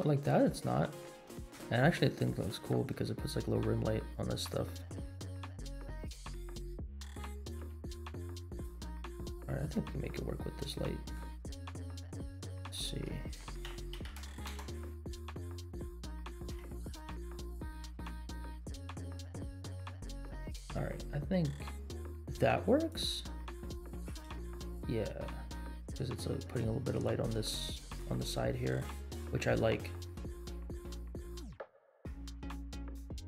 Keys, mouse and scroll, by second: 0.2 middle click, 1.5 KP_0, 2.2 scroll up 2, 2.6-2.9 shift+middle drag, 3.7 scroll down 3, 4.9 r, 7.7 g, 8.9-9.2 middle drag, 9.5 r, 10.8 middle drag, 11.8 r, 12.6 r, 15.3 middle click, 16.0 g, 23.4-23.8 scroll down 4, 24.2 space, 25.5-26.1 scroll up 4, 27.6-28.1 scroll up 3, 28.3 shift+middle click, 30.6-31.3 scroll down 4.